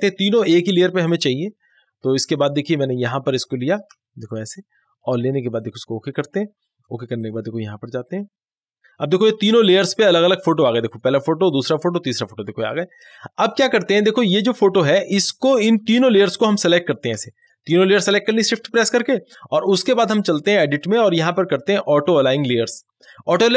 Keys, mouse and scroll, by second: 4.3 shift+click, 10.3 scroll down 1, 10.9 click, 17.2 click, 20.5 click.